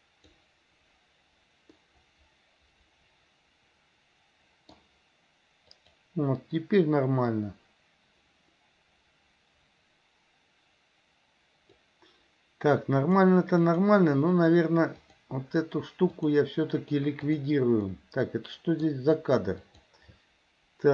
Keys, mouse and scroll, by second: 1.9-5.0 middle drag, 5.9 click, 7.5-12.1 drag, 13.0-14.0 drag, 15.0 click, 16.2-17.6 drag, 18.0-19.1 middle drag, 19.8 click.